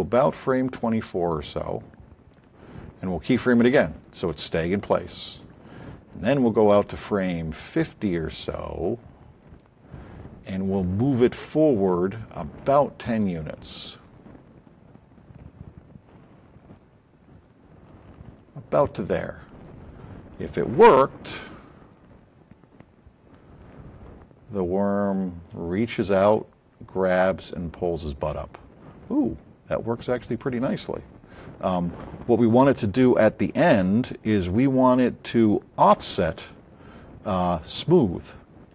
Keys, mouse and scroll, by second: 4.0 click, 6.1 click, 9.6-10.5 drag, 12.8-14.0 drag, 21.3 click, 29.3-30.8 drag.